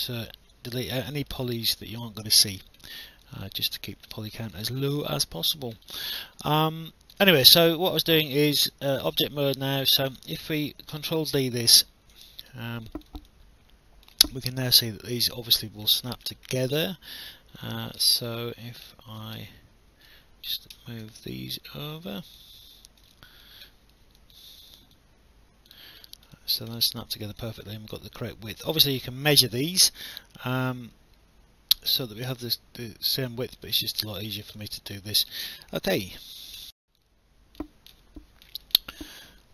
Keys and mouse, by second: 0.1 alt+middle click, 0.5 alt+click, 0.9 alt+middle click, 2.0 alt+click, 3.0 alt+middle click, 3.2 alt+click, 3.7 alt+middle click, 4.6 alt+click, 5.0 alt+middle click, 6.5 alt+click, 8.0 right click, 11.2 ctrl+d, 12.1 click, 13.3 alt+click, 17.6 click, 19.4 v, 20.7 w, 21.7 click, 23.2 alt+click, 23.7 alt+middle click, 24.2 alt+click, 26.3 alt+click, 26.7 alt+middle click, 27.4 alt+click, 30.0 alt+click, 33.3 click, 34.6 alt+click, 35.0 alt+middle click, 36.6 alt+F9.